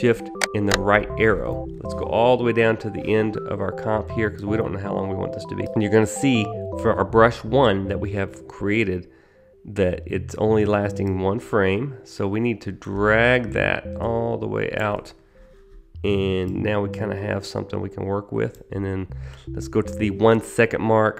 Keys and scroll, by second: 0.5 shift+fn+Right.